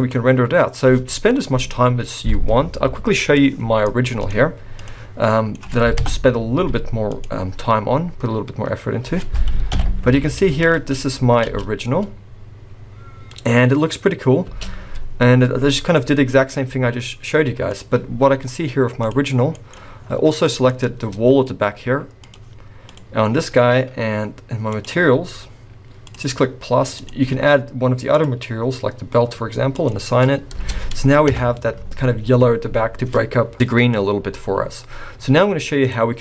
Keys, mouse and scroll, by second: 19.0 click, 19.4-20.5 scroll down 10, 19.7 middle click, 20.4 middle click, 20.6-21.0 scroll up 3, 21.0 Tab, 22.3 click, 22.8 click, 24.7 click, 26.0 click, 26.9 click, 29.7 click, 30.6 Tab, 31.2 KP_0, 32.0-32.7 scroll up 4, 34.6-35.3 scroll up 2, 35.3 z.